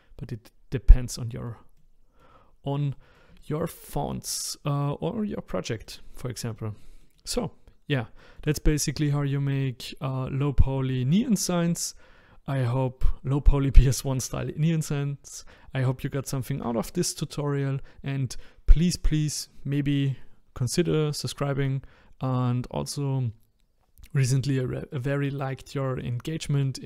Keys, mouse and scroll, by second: 2.4-2.9 scroll up 2, 2.9-3.9 middle drag, 3.9-4.4 scroll down 1, 4.4-26.8 middle drag.